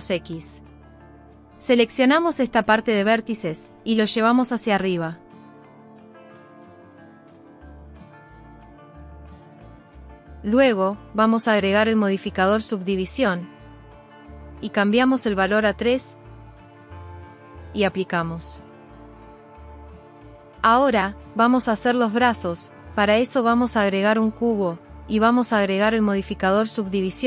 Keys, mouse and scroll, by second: 1.1 click, 3.6 g, 5.1 middle click, 5.8 middle click, 6.4 middle click, 9.7 click, 11.6-13.8 drag, 15.0 click, 15.5 click, 16.9 click, 19.1 click, 20.4 g, 21.7 shift+a, 26.5-27.2 drag.